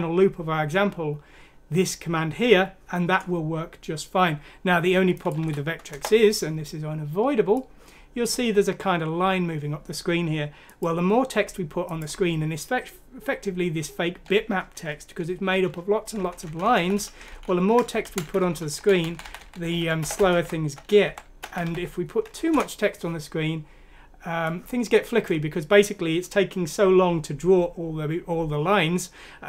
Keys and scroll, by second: 5.4 F6, 5.9 Return, 16.2 Down, 16.5 typing, 17.5 typing, 18.3 Home, 19.0 Right, 19.1 Right, 19.2 Right, 21.0 Delete, 21.3-22.1 typing, 22.4 F6, 22.5 Return, 23.9-24.7 typing.